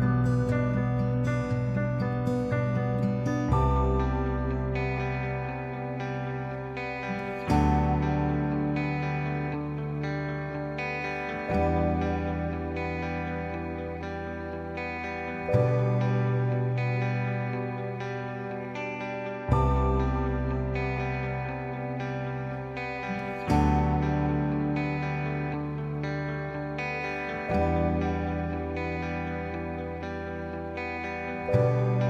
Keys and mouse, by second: 0.7 shift+middle click, 1.4 a, 2.2 shift+z, 2.6-5.2 middle drag, 6.9 shift+middle click, 8.2 click, 9.4 shift+middle click, 11.4 ctrl+right click, 17.4 shift+middle click, 21.0 shift+middle click, 27.2 ctrl+right click, 28.5 click, 30.7 ctrl+shift+t.